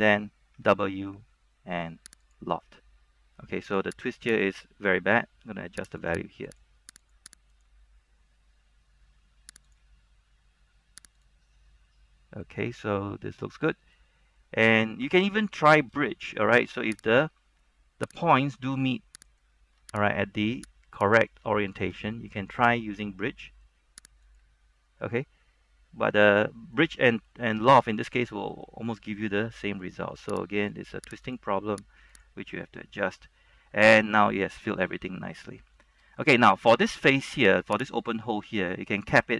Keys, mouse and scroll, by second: 0.6 w, 2.4 click, 12.0 middle click, 12.7-14.2 middle drag, 14.3 scroll up 1, 14.5 middle click, 16.1 shift+middle click, 17.2 alt+right click, 18.2 alt+right click, 18.6 middle click, 19.4 alt+shift+right click, 20.2 alt+right click, 21.1 alt+shift+right click, 21.6 middle click, 22.3-23.3 shift+middle drag, 23.1 w, 24.4 click, 24.9-28.8 middle drag, 30.7 click, 33.0-35.3 middle drag, 35.3 middle click, 35.9 scroll up 1, 36.5 middle click, 37.1 scroll up 1, 37.6 shift+middle click, 38.1 alt+right click, 38.9 middle click.